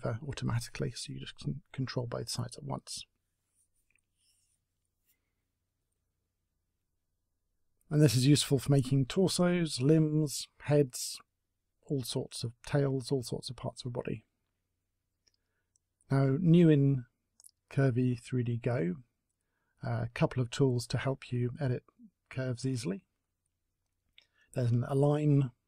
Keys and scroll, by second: 13.0 Delete, 13.8 Delete.